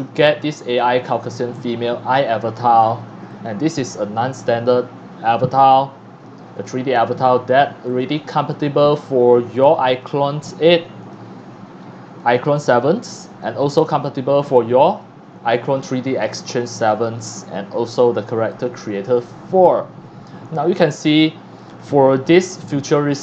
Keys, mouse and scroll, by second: 0.0 click, 0.8-1.9 drag, 2.6 click, 3.3 click, 7.9 click, 9.0 click, 11.0 click, 13.3 click, 16.9 click, 18.5 click, 19.6-19.9 scroll down 2, 19.9 scroll up 1, 20.2 scroll down 1, 20.5 x, 20.6-21.6 drag, 20.8 c, 21.8-22.4 scroll up 2, 22.6 x, 22.7 click, 22.9 c, 23.1 click.